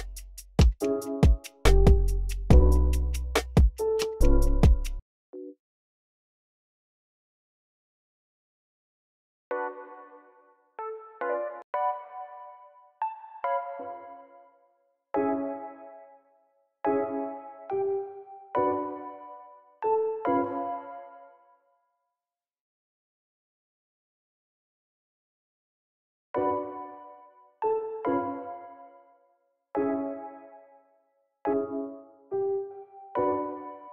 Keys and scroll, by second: 5.0-5.8 typing, 9.3 space, 10.7 e, 10.9 super+a, 11.2 alt+shift+Up, 12.7-13.5 typing, 13.4 Up, 15.0-16.6 typing, 21.3 space, 26.1 space, 29.6 v, 31.4 s, 32.6 s.